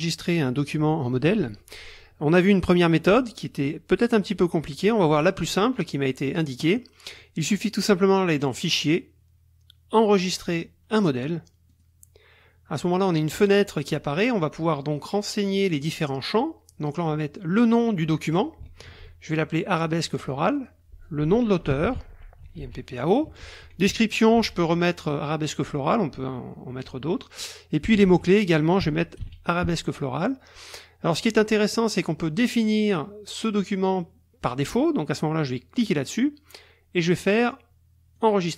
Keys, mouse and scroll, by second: 8.5 click, 11.7 click, 13.6-15.1 drag, 18.9 ctrl+v, 20.6 click, 21.4-23.1 typing, 23.3 Tab, 24.3 ctrl+v, 27.4 click, 28.1 ctrl+b, 29.2 ctrl+v, 31.5 click, 35.7 click, 38.2 click.